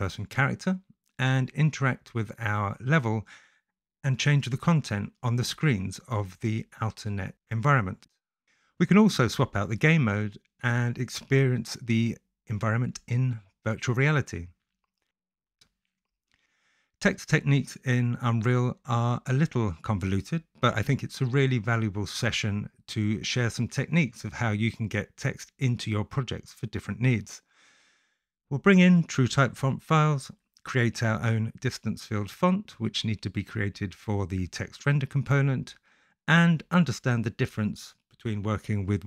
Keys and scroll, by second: 1.4 w, 6.4 space, 26.5 e, 28.0 ctrl+c, 28.4 ctrl+v, 29.9 o, 32.3 shift+s, 33.7 1, 33.8 Tab, 35.3-36.8 typing.